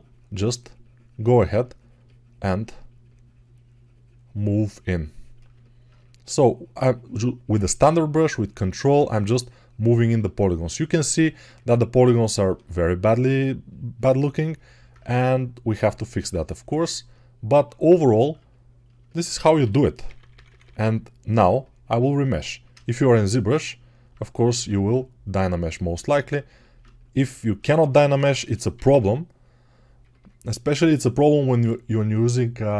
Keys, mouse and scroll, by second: 15.4-18.1 ctrl+right drag, 18.1-32.7 alt+shift+drag, 19.4-20.3 typing, 21.3 ], 24.4 x, 28.2 g, 28.6 ], 28.7 ], 28.9 ].